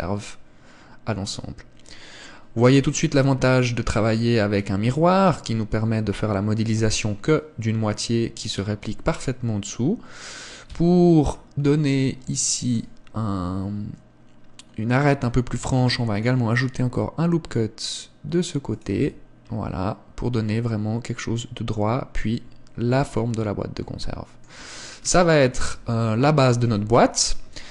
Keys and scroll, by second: 10.8 Tab, 15.8 ctrl+r, 19.1 Tab, 25.7 KP_0, 26.8 KP_1.